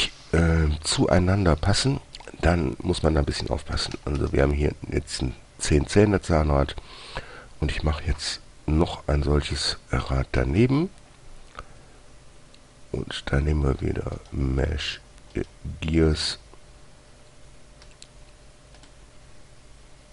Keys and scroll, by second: 4.1-4.5 typing, 10.8 shift+a, 18.2 g.